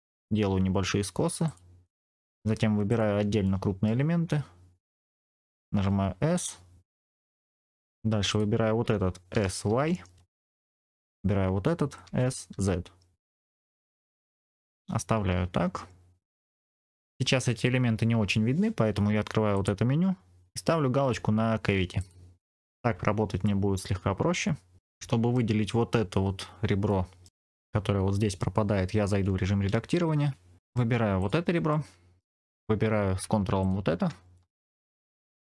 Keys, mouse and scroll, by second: 1.3 click, 1.8 click, 2.8 shift+click, 3.4 middle click, 5.6 s, 7.1 click, 7.4 middle click, 8.2 click, 9.2 s, 9.6 y, 10.6 click, 10.7 middle click, 11.0 click, 11.9 s, 12.4 z, 13.4 click, 13.6 middle click, 13.9-14.4 scroll down 2, 14.2 Tab, 14.5-16.7 middle drag, 16.7 scroll up 2, 17.0 click, 19.4-22.2 drag, 22.5-23.3 scroll down 1, 23.3-25.3 middle drag, 26.8 middle click, 29.0 Tab, 30.6 middle click, 30.6 click, 31.1 click, 31.6 middle click, 33.5 ctrl+click, 34.2-35.3 middle drag.